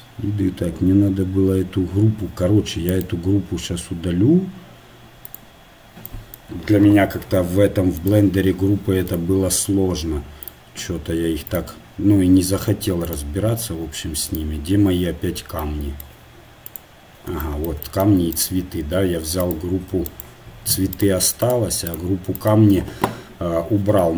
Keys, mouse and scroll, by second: 9.1-19.4 drag, 16.7-20.1 middle drag, 18.4-24.1 right drag.